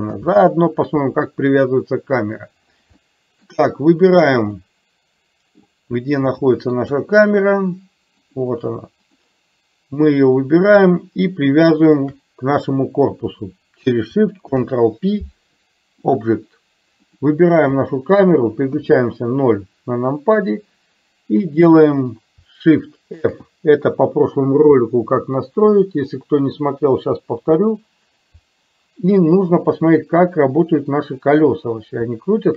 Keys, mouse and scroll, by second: 0.1 ctrl+z, 3.0 middle click, 4.6-5.6 middle drag, 6.6 shift+middle click, 8.3 click, 10.0 click, 11.8 shift+click, 14.5 ctrl+p, 18.9 KP_0, 23.3 shift+f.